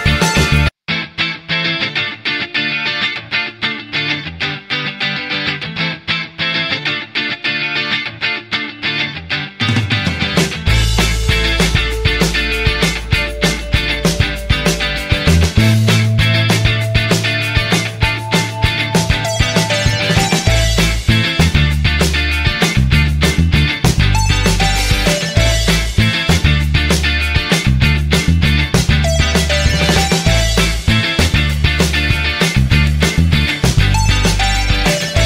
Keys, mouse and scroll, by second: 1.4 typing.